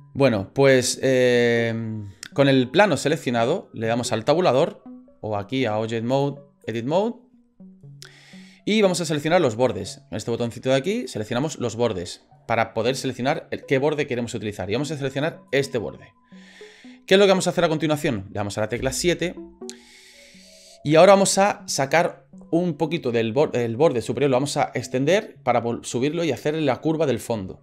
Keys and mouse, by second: 6.1 click, 11.0 click, 15.5 right click, 18.7 KP_7.